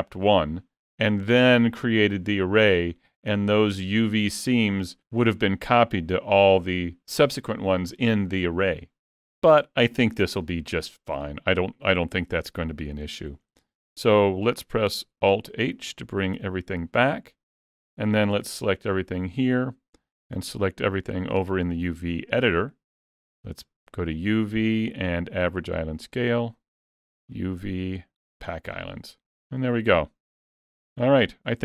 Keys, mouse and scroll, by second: 10.2 a, 11.5-12.2 scroll down 2, 13.2 a, 15.5 alt+h, 16.4 alt+a, 16.7-17.0 scroll down 2, 17.1 middle click, 18.4 a, 18.9 shift+middle click, 20.3 a, 24.2 click, 27.1 click, 30.4 alt+a, 31.2 shift+middle click.